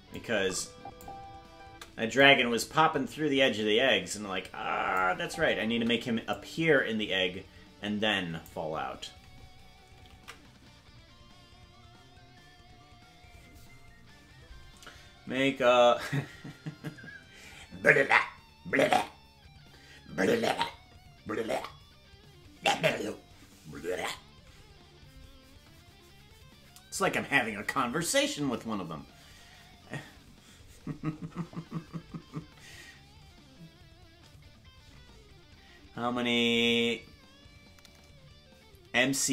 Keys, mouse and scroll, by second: 0.1 click, 1.6 space, 2.2-5.0 drag, 5.0 space, 6.3-8.4 drag, 6.3 space, 12.1 ctrl+s.